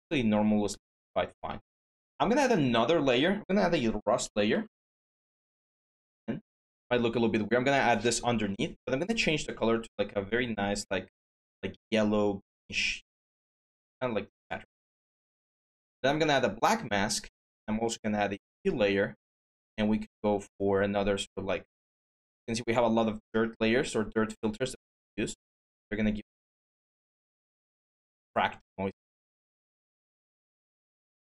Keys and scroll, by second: 3.4-4.9 typing.